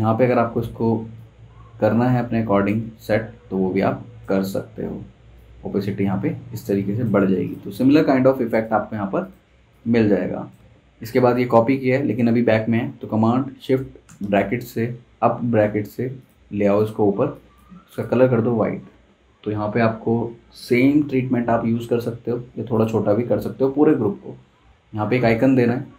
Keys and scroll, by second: 8.4 v, 14.0 shift+super+].